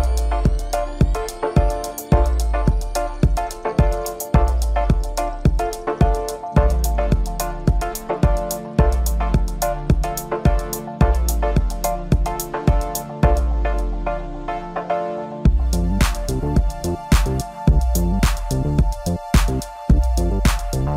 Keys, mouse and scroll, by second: 2.2 click, 7.5-8.6 drag, 9.1-11.7 drag, 15.1-19.3 drag, 20.1-20.9 drag.